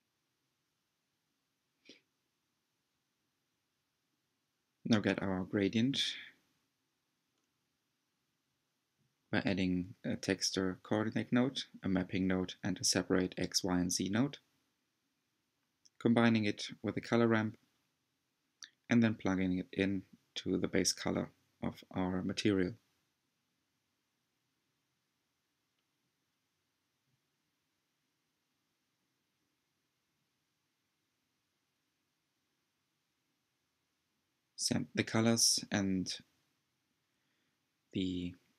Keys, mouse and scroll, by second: 1.2-2.4 drag, 2.4-4.1 scroll up 2, 8.2 shift+a, 11.8 click, 12.7 shift+a, 14.0 click, 15.3 click, 15.8 click, 17.3-17.7 scroll up 3, 17.7-20.6 shift+middle drag, 20.6-25.5 drag, 26.4 click, 30.9-31.4 scroll down 2, 31.4 Tab, 32.1-32.9 scroll up 3, 34.3-38.5 drag.